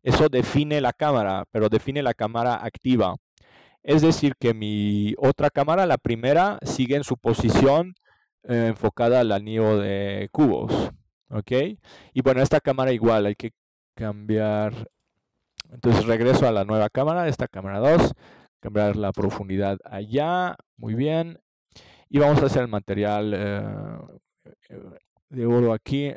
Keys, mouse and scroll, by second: 1.5 middle click, 2.7 middle click, 5.2-8.4 drag, 13.4-15.2 drag, 15.2 middle click, 16.2-17.8 drag, 17.8 middle click, 20.9 ctrl+s, 24.0-25.4 drag.